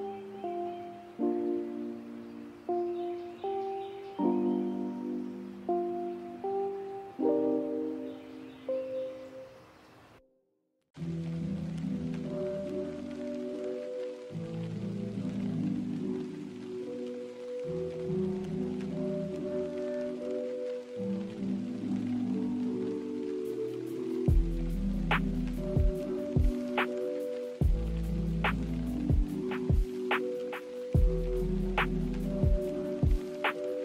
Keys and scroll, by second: 0.0-0.4 typing, 7.5 ctrl+z, 7.7 ctrl+z, 7.9 ctrl+z, 11.4-12.4 typing, 15.0 b, 16.1 Delete, 17.7 a.